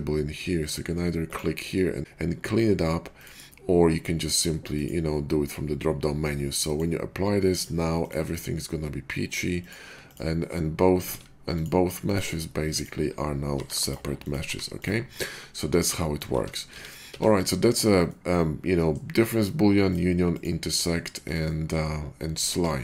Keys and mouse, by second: 1.3-3.2 drag, 3.2-4.6 middle drag, 4.6-8.0 drag, 8.0-9.6 middle drag, 9.6-11.1 drag, 11.1 ctrl+z, 12.8-14.1 middle drag, 13.5 g, 14.4 g, 16.3 ctrl+z, 16.6 ctrl+z, 17.0 ctrl+z, 18.1-19.8 middle drag, 19.9-20.2 middle drag, 20.4-21.9 middle drag, 22.5 ctrl+z.